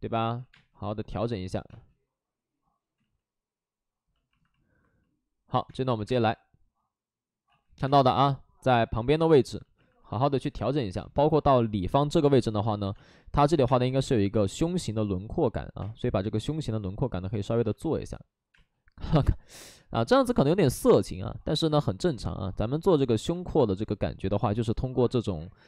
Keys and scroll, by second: 0.3 ctrl+z, 0.4 space, 1.6 space, 2.9 ctrl+z, 5.6 space, 5.9 3, 6.1 3, 7.4 ctrl+z, 7.8 space, 8.9 ctrl+z, 10.9 space, 12.1-13.7 typing, 12.7 alt+s, 15.7 space, 17.5 alt+s, 18.4 space, 20.3 alt+s, 21.5 alt+s, 21.7 space, 23.1 2.